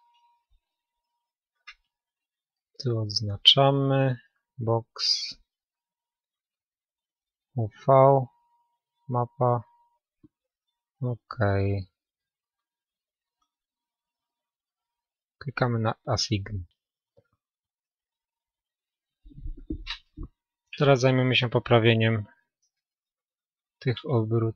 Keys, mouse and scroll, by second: 2.8-4.8 middle drag, 17.5-19.9 middle drag, 19.9 KP_1, 21.8-22.4 scroll down 1, 22.4-24.3 middle drag, 24.2-24.5 drag.